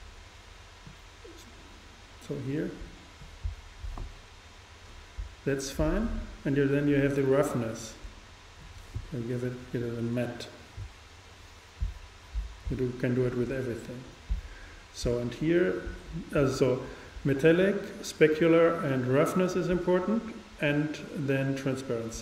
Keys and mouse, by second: 0.9-2.7 drag, 7.4-9.2 drag, 21.6-22.2 drag.